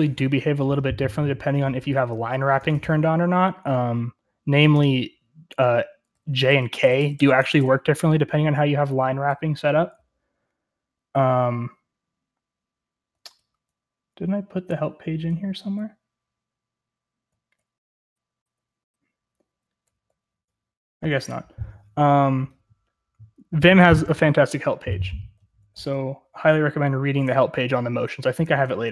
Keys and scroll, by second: 5.8-8.0 typing, 13.0-28.9 typing.